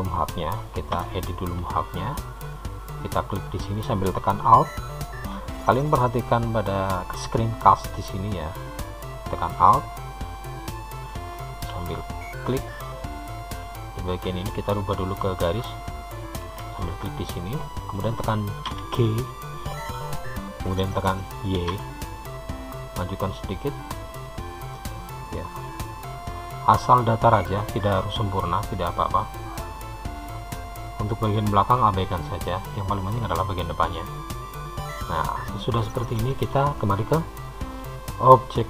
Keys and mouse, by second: 1.4 Tab, 2.5 click, 9.5 alt+click, 11.0 alt+click, 13.2 click, 15.8 alt+click, 18.8 g, 24.0 click, 24.4-36.5 middle drag.